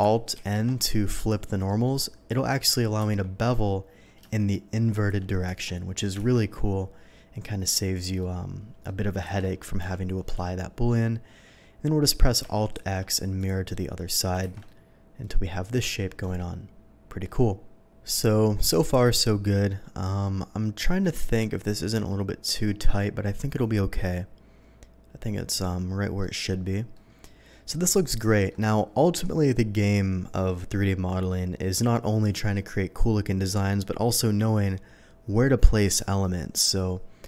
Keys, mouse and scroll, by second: 0.3 alt+n, 1.1 click, 1.7 middle click, 3.0 ctrl+b, 4.9 shift+click, 5.4 Tab, 6.4-7.7 shift+middle drag, 7.9 scroll down 1, 8.2-8.8 middle drag, 9.2 ctrl+z, 9.8 g, 10.4 Escape, 10.9-12.1 middle drag, 12.7 alt+x, 13.4 click, 13.7-14.1 middle drag, 14.4 shift+2, 14.6-15.8 middle drag, 16.0-17.2 middle drag, 17.7-18.0 middle drag, 18.3-18.9 scroll up 1, 18.9-20.3 middle drag, 20.5 middle drag, 20.9 scroll up 1, 21.2 middle click, 24.0-26.2 middle drag, 26.9-27.7 middle drag, 28.3 middle click.